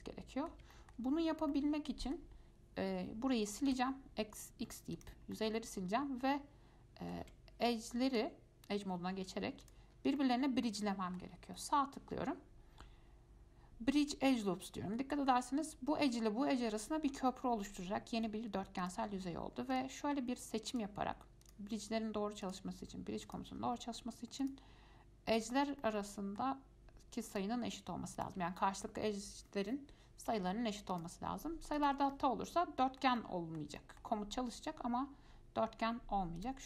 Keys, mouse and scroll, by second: 3.9 x, 5.5-7.4 middle drag, 7.4 2, 8.3 click, 9.8 shift+click, 10.4-11.8 middle drag, 11.8-14.6 right drag, 14.6-17.6 middle drag, 19.0 click, 19.9 shift+click, 20.9 shift+click, 21.6 shift+click, 22.6 shift+click, 23.4 shift+click, 24.6 shift+click, 25.6 shift+click, 26.0-27.5 middle drag, 27.5 shift+click, 28.4 shift+click, 31.1 shift+click, 32.0 shift+click, 32.3-34.8 middle drag, 34.8-36.6 right drag.